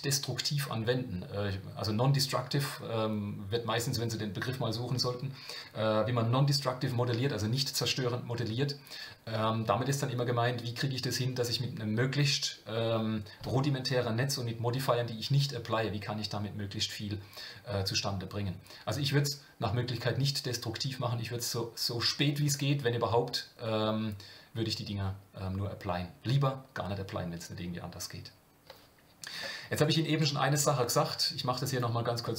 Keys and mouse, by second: 31.7 click.